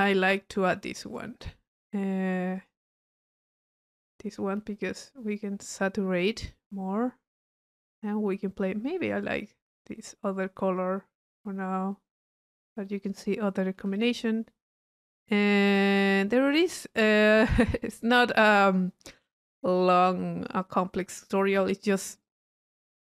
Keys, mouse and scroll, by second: 0.6 right click, 1.1 click, 2.6 click, 3.5 click, 5.3-7.5 drag, 8.0-12.2 drag, 12.7-13.1 drag, 14.0 click, 14.6 middle click, 15.2 click, 15.8 click, 16.4-16.7 drag, 17.7 middle click, 18.5 click, 19.8 click, 20.9 middle click, 21.3 click.